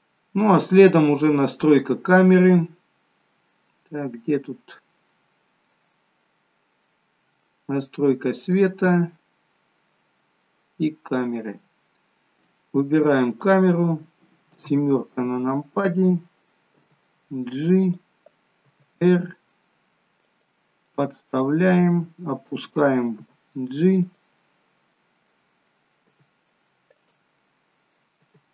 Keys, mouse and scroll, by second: 0.0-1.2 scroll down 8, 2.7-3.6 scroll down 4, 3.6-5.7 scroll down 1, 8.4 click, 9.1-9.6 scroll down 2, 9.6-10.1 scroll up 2, 11.1 click, 11.7-12.4 scroll down 2, 13.4 click, 14.6 KP_7, 16.8 g, 18.7 r, 20.9 middle click, 23.2 g, 24.7 middle click, 25.3 middle click, 26.1 g, 27.3 middle click, 28.1 g.